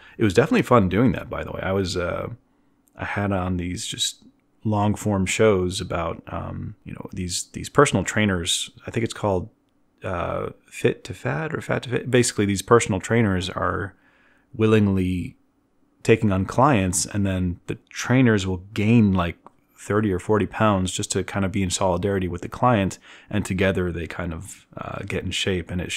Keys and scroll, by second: 0.9 b.